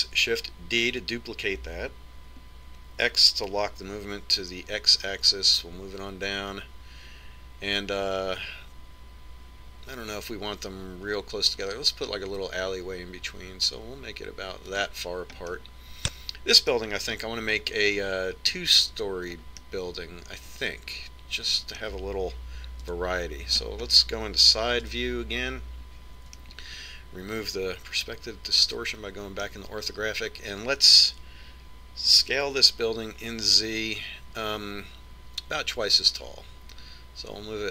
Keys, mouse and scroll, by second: 2.0 shift+d, 16.8-22.8 middle drag, 24.3 KP_3, 24.9-27.4 middle drag, 26.2 KP_5, 27.8-29.5 middle drag, 33.6 s.